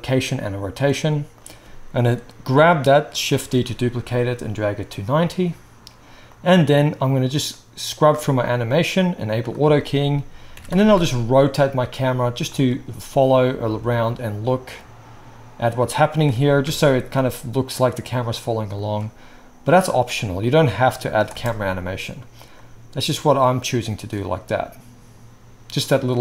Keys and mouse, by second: 3.3 shift+d, 5.2-5.6 drag, 5.6-13.7 right drag, 6.3-9.3 drag, 6.3-9.3 middle drag, 10.5 r, 13.7-18.4 middle drag, 16.2 r, 18.8-19.7 shift+drag, 19.9-20.5 drag, 21.3 space.